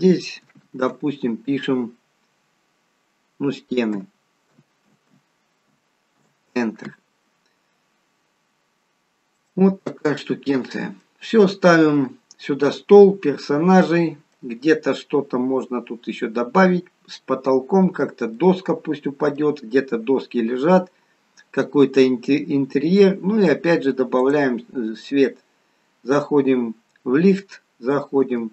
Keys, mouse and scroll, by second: 0.8 click, 8.2-9.3 scroll down 1, 9.3 middle click, 9.3-9.9 scroll up 2, 9.9 middle click, 12.5-13.4 scroll down 2, 13.4-13.7 scroll up 2, 13.8 middle click, 16.1 scroll down 1, 18.4 middle click, 22.6-22.9 scroll up 1, 22.9-23.9 scroll down 1, 24.3 click, 28.3 Tab.